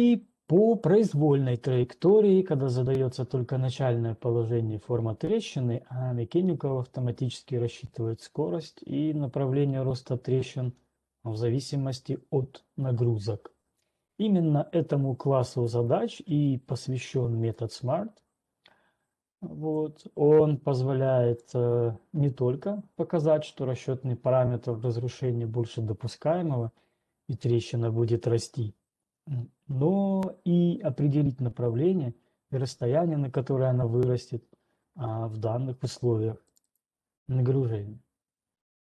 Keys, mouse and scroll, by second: 2.2 click, 6.7-9.0 scroll, 17.8 click, 21.7 click, 36.8 click, 37.3 click.